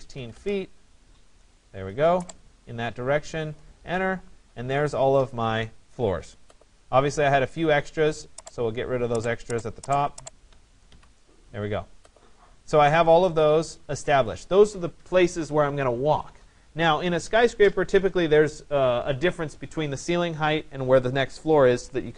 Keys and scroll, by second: 0.4 Return, 10.5 Delete.